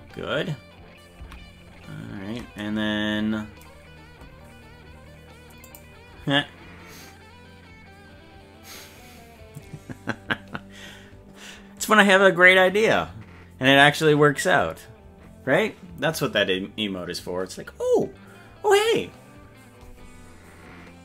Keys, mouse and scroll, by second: 1.3 ctrl+z.